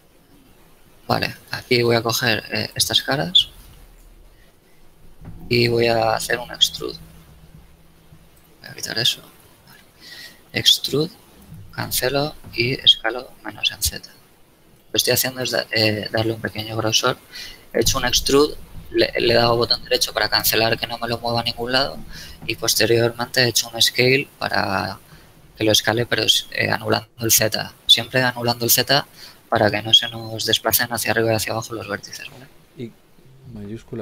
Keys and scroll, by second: 1.6 ctrl+shift+Tab, 3.9 KP_7, 10.4 shift+e, 13.0 shift+z, 28.7 KP_1, 32.3 a.